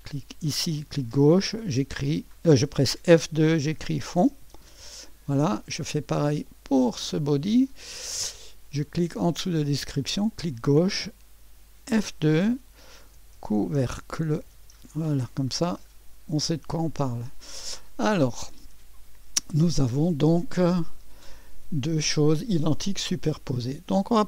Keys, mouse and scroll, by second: 0.0 click, 3.1 F2, 3.5-5.1 typing, 6.4 click, 10.2 click, 10.5 click, 11.9 F2, 12.7-15.0 typing, 18.1-21.1 scroll down 1, 22.0-22.6 scroll down 1, 22.6 click.